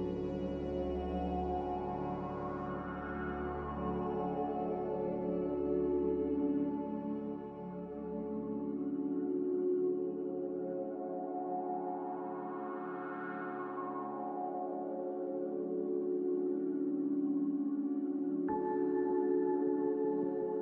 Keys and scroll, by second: 3.2 z, 10.0 z.